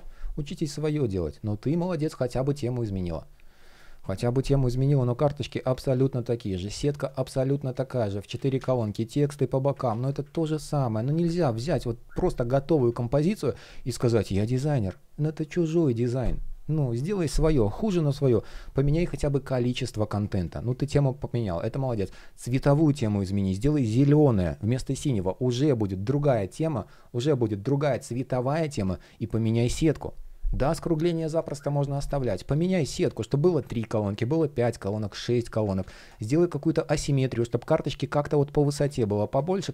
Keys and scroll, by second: 5.6 super+z, 8.0 super+z, 9.5 super+z, 9.9 super+z, 29.1 super+z, 35.4 super+z.